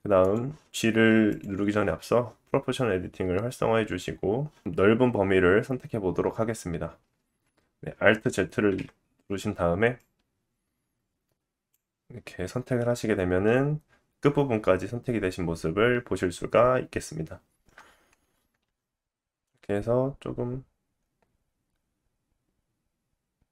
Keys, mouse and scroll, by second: 0.3 middle click, 1.2 click, 1.4-9.9 middle drag, 7.1 alt+z, 8.7 KP_3, 9.9-23.5 drag, 12.7 middle click, 18.6 g.